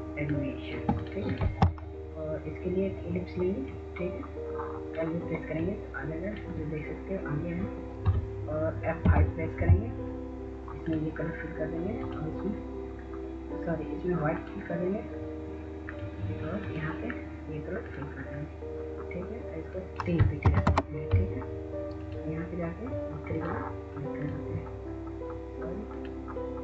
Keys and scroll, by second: 9.3 F5, 20.8 3, 21.1 Return.